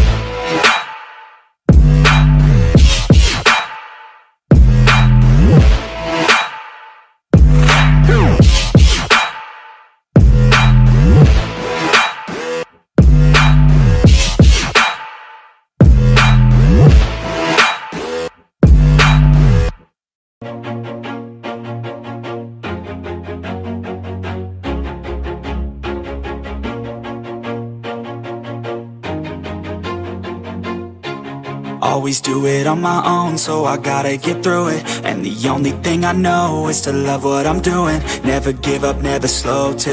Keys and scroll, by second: 1.1 ctrl+e, 1.2 ctrl+t, 6.2 ctrl+z, 7.2 ctrl+d, 7.9 ctrl+t, 10.4 ctrl+t, 11.4 ctrl+j, 11.8 ctrl+t, 14.7 ctrl+e, 21.3 ctrl+j, 21.6 ctrl+t, 23.4 ctrl+t, 25.4 ctrl+d, 30.2 ctrl+d, 32.5 ctrl+j, 33.7 ctrl+t, 34.2 ctrl+j, 34.4 ctrl+t, 36.9 ctrl+t.